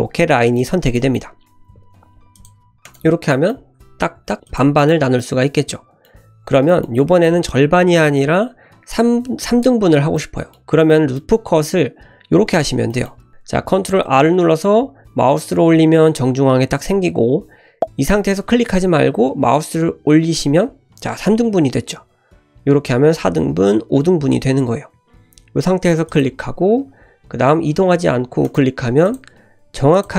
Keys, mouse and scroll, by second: 1.6 ctrl+r, 3.3 middle click, 4.1 ctrl+r, 5.2-6.3 middle drag, 6.4 scroll up 1, 6.7 shift+middle click, 7.0 middle click, 7.5-7.8 scroll down 2, 7.9 ctrl+z, 8.5 ctrl+z, 8.9 scroll up 1, 10.2-10.6 middle drag, 10.9 middle click, 12.5-12.9 scroll up 1, 12.9 middle click, 13.3 ctrl+z, 13.8 ctrl+r, 29.1 click, 29.7 3, 30.0 click.